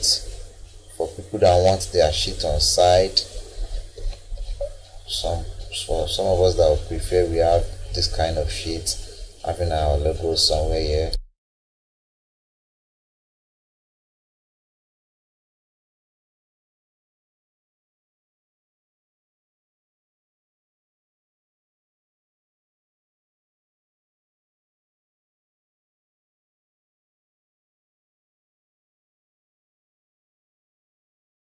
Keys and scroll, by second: 4.1 Escape.